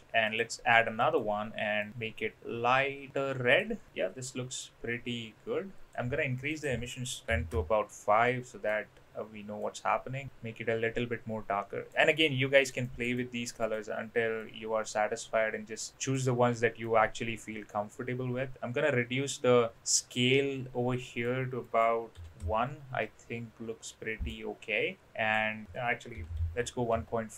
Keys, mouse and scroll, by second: 0.3 click, 1.0 click, 4.7-5.9 drag, 6.5-7.8 drag, 8.2-8.6 middle drag, 9.6-10.2 drag, 13.1 click, 13.7 click, 16.8-21.2 drag, 21.7 click, 23.0-24.3 middle drag, 25.0-27.2 drag.